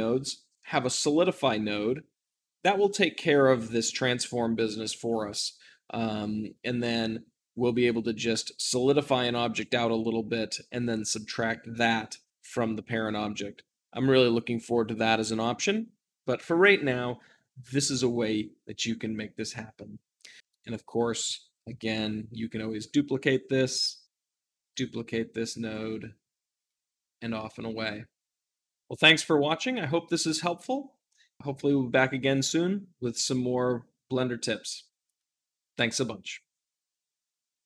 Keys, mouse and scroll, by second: 20.5-21.5 drag, 21.6 shift+d, 21.8-23.0 middle drag, 23.0-28.8 drag, 28.8-37.6 middle drag.